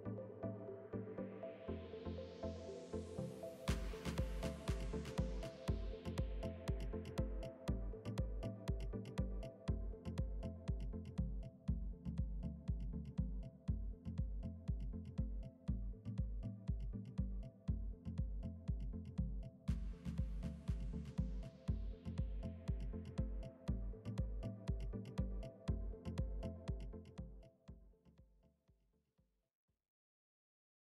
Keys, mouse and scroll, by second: 0.7 click, 2.3-3.6 drag, 2.6 middle click, 3.2 Tab, 3.6 middle click, 4.0 Delete, 4.8-5.8 middle drag, 6.1-8.2 drag, 8.2-11.1 middle drag, 10.7 ctrl+r, 12.9-13.9 middle drag, 13.5 ctrl+r, 16.4-17.5 middle drag, 17.5 ctrl+r, 18.9 ctrl+r, 21.6 Tab, 21.8-24.0 drag, 22.1-23.7 middle drag, 24.0 middle click, 24.4 click, 25.4-27.0 middle drag, 27.0 click, 28.0 middle click.